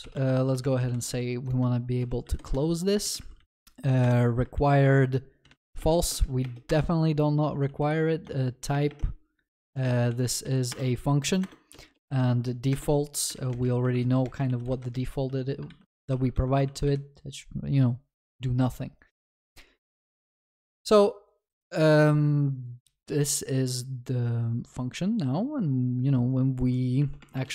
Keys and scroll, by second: 4.0 Return, 8.3 Return, 15.6 ctrl+s.